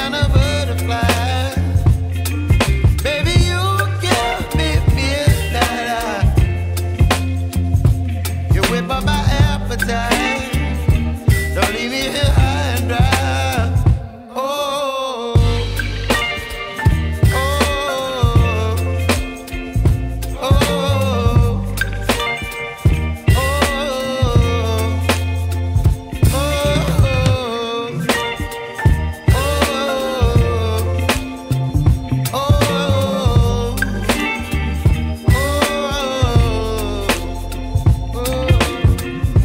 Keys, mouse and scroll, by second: 3.1 click, 4.5 middle click, 4.7 click, 4.8 middle click, 5.4 click, 7.7-10.4 drag, 11.4-13.2 middle drag, 13.2-13.7 drag, 16.2 click, 16.7-18.9 drag, 19.8 click, 21.1-22.9 drag, 23.4-25.9 drag, 28.1-28.8 drag, 29.1-30.0 scroll up 2, 30.3 scroll down 1, 31.3-31.7 scroll down 1, 31.7 click, 35.5 click, 35.6 middle click, 35.7 click.